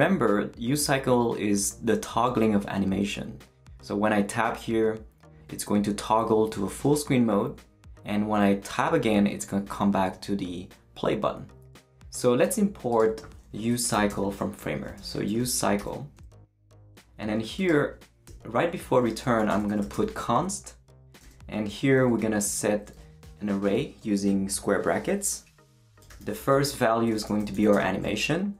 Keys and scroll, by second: 13.9-16.3 typing, 18.3 shift+Return, 19.2-21.2 typing, 22.0 Left, 22.7 Right, 22.9 Left, 25.6-28.5 typing.